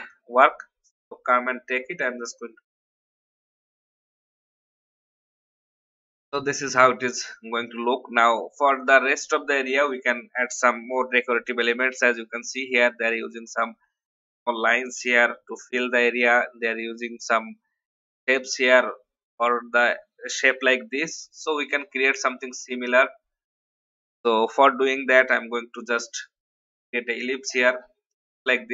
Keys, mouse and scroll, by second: 5.0 F10, 5.7 click, 8.0-8.8 alt+scroll down 1, 8.8 click, 9.7 alt+scroll down 1, 10.5 alt+scroll up 1, 11.1 click, 21.0 click, 22.5 alt+scroll up 1, 24.4 click, 25.8 alt+shift+click, 28.4 shift+x.